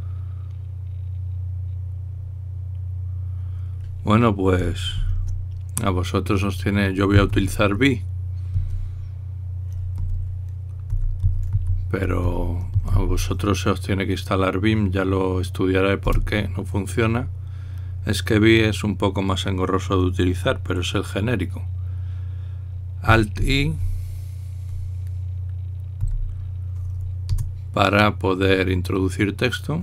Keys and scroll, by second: 5.9 ctrl+l, 7.9 typing, 10.7-14.2 typing, 16.9 Return, 24.2 alt+i.